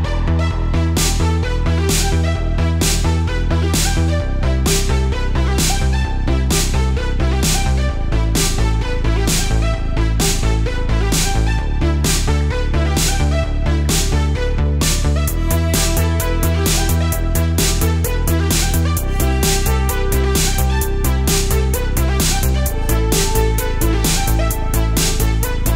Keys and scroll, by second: 1.6 space, 2.2 space, 3.2 super+z, 4.5 super+z, 9.9 space, 10.6 super+space, 12.3 space, 12.8 alt+super+space, 13.4 super+space, 14.1 super+space, 14.8 super+z, 15.6 super+z, 16.8 space, 18.9 space, 19.8 space, 21.3 super+z, 22.7 space, 23.6 super+space.